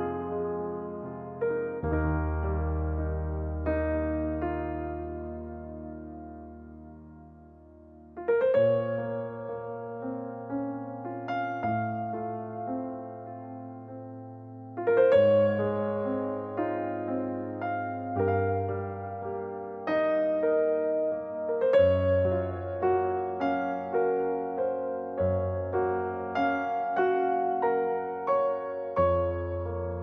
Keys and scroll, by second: 0.7 m, 2.9-3.8 typing, 4.0 Return, 6.3-6.7 typing, 13.5 e, 14.9 6, 15.1 Return, 15.5 space, 19.9 e.